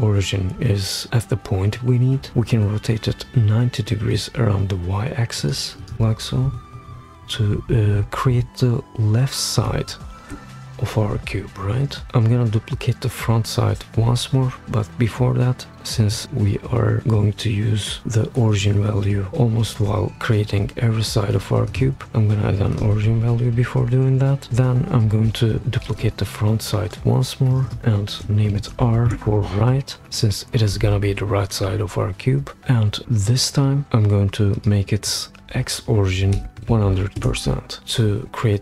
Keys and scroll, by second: 6.4 shift+Up, 6.6 shift+Up, 6.9 shift+Up, 9.6 shift+Up, 25.8 super+d, 28.5 shift+r, 29.1 Return, 36.1-37.1 typing, 37.2 Return.